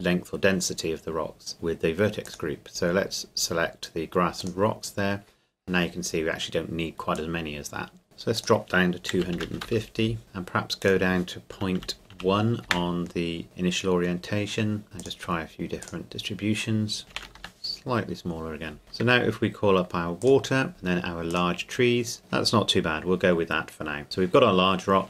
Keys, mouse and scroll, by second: 2.2 click, 5.9-7.2 scroll up 2, 7.2 click, 9.2 KP_2, 9.4 KP_5, 9.4 KP_0, 9.7 KP_Enter, 10.2-10.8 scroll down 2, 10.8 click, 11.8 KP_Decimal, 12.1 KP_1, 12.7 KP_Enter, 14.8 click, 17.0 KP_Decimal, 17.1 KP_1, 17.4 KP_Enter, 20.2 shift+click.